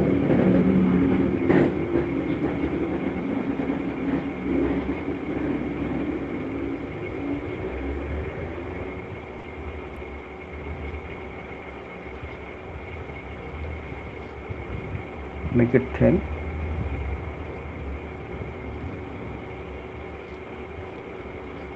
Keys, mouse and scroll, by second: 1.1 alt+click, 1.5 alt+click, 1.9 alt+click, 5.2 shift+click, 6.4 alt+click, 8.5 alt+click, 8.7 alt+click, 11.0 alt+click, 11.3 shift+click, 11.8 alt+click, 14.2 shift+click, 17.7 click, 18.6 alt+click, 20.6 click, 21.6 click.